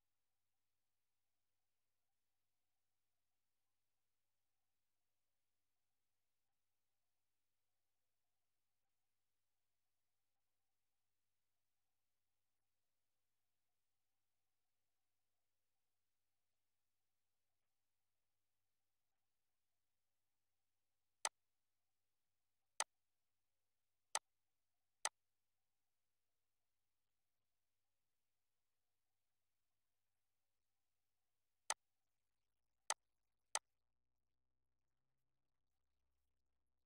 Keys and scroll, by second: 11.2 d, 12.7 BackSpace, 17.6-19.4 typing, 25.8 BackSpace, 27.2 Caps_Lock, 28.1-30.0 typing.